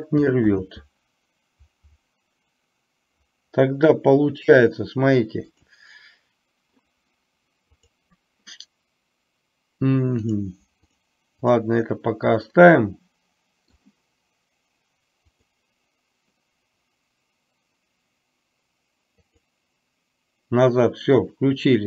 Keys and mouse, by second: 0.6 ctrl+z, 5.6-6.8 drag, 7.8 click, 10.3 click, 11.0 click, 11.6 click, 12.6-13.6 middle drag, 19.5 click.